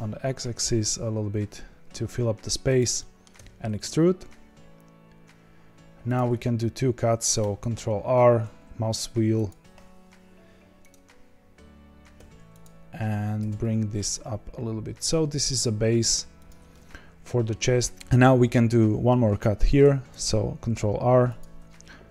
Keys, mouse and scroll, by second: 2.9 middle click, 3.3 e, 7.4 ctrl+r, 12.1 3, 12.6 click, 13.4 g, 16.7-19.8 middle drag, 19.8 ctrl+r.